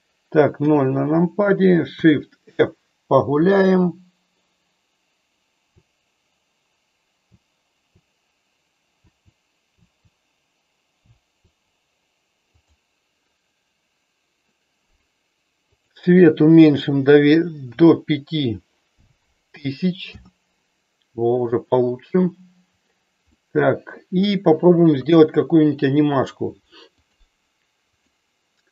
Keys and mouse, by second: 0.5 KP_0, 2.5 shift+f, 3.4-5.7 Up, 7.2 Left, 7.7 Left, 9.7 Left, 11.0 Down, 15.7-20.2 drag, 23.4 middle click, 24.9 KP_1.